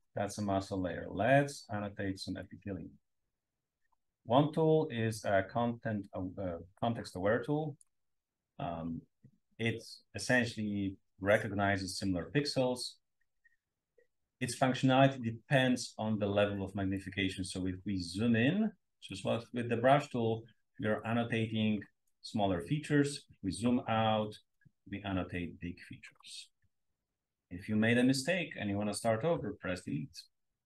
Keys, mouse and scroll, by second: 0.9-2.7 scroll up 1, 2.7-8.0 drag, 8.4-11.5 scroll up 1, 11.4-12.5 drag, 13.8-15.1 scroll up 2, 16.2-16.5 scroll up 2, 17.1-18.5 drag, 19.1-20.1 drag, 20.9-21.9 drag, 20.9-21.9 scroll up 1, 21.9 scroll up 1, 22.0-23.3 scroll down 1, 23.3-24.1 scroll up 1, 24.6-26.3 drag, 29.3 BackSpace.